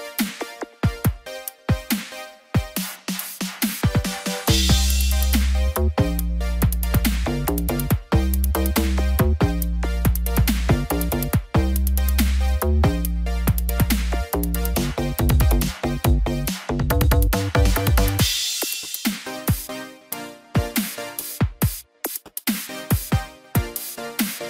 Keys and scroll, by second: 4.2 ctrl+-, 5.0 ctrl+0.